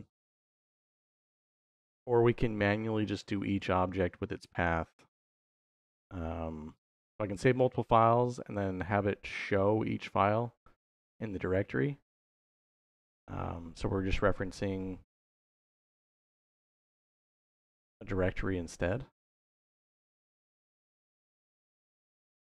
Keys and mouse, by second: 2.5 middle click, 6.6-7.8 drag, 9.2-12.6 drag, 16.8-20.8 drag, 21.8 middle click.